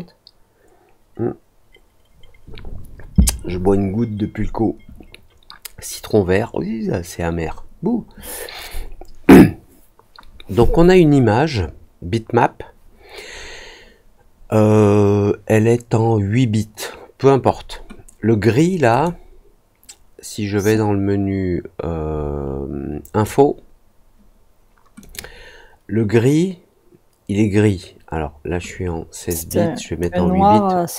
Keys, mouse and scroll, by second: 18.8 click, 20.6-23.2 drag, 24.9 click, 28.6-29.9 drag.